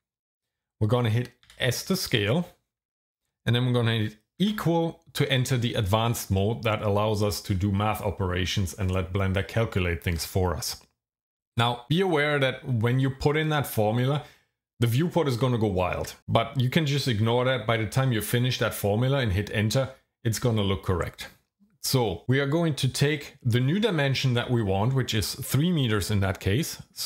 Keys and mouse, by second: 1.5 s, 4.4 =.